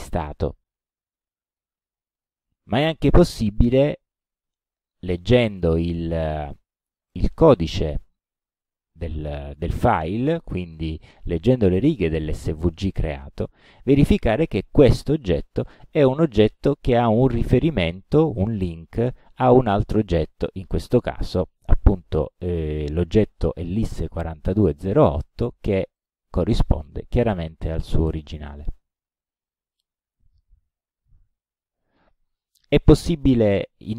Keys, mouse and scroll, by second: 2.2 middle click, 4.3 click, 6.4 click, 8.2-9.3 drag, 13.1 click, 26.0 click, 27.0 click, 28.5 middle click, 31.0 click, 31.7 click, 31.9 middle click.